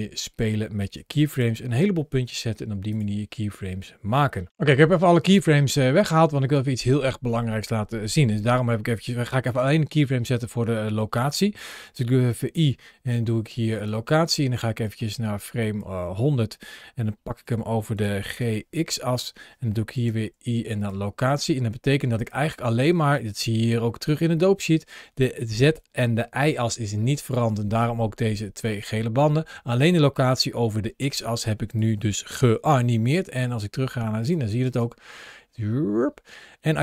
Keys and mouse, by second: 0.6 space, 1.0 click, 6.2 click, 9.0 g, 12.3 i, 14.7-15.6 drag, 17.8 g, 18.9 click, 22.0 click, 23.7 ctrl+shift+a, 34.1 click, 34.5 space.